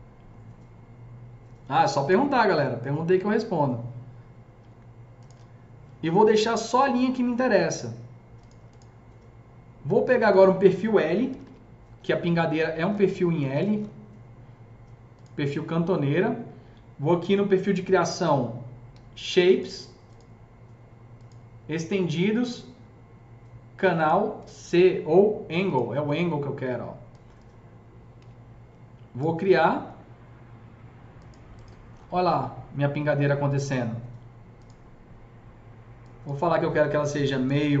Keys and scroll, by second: 4.6 Delete, 5.2 Delete, 11.0-11.9 typing, 28.1 s, 37.1-37.8 typing, 37.3 Tab.